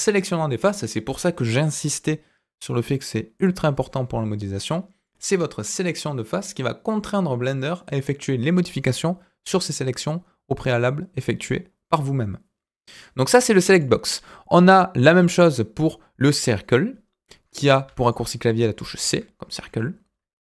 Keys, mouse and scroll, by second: 13.7 click, 15.7-17.8 drag, 18.4 middle click, 19.5 KP_1, 20.4-20.5 scroll up 2.